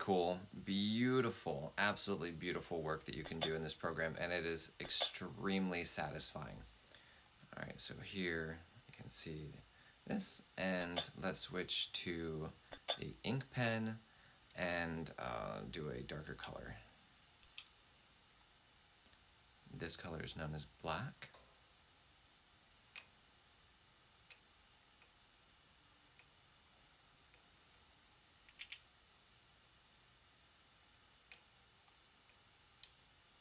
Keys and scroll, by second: 3.2 F8, 4.7 F8, 10.7 F8, 12.6 F8, 16.2 F6, 17.3 F6, 28.4 typing.